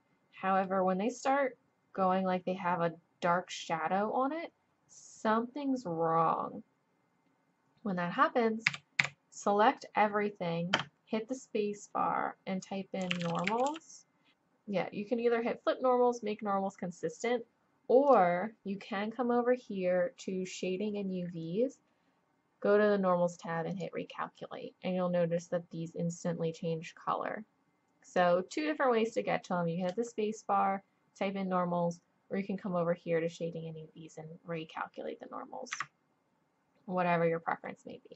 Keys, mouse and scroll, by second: 8.7 a, 9.0 a, 10.8 space, 20.5-22.7 drag, 23.7-27.1 drag, 29.9 space, 37.7-38.1 middle drag.